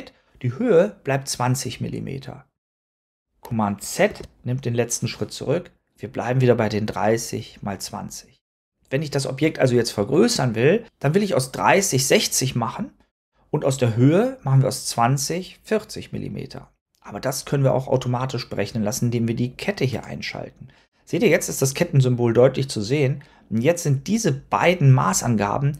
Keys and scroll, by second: 4.0 super+z.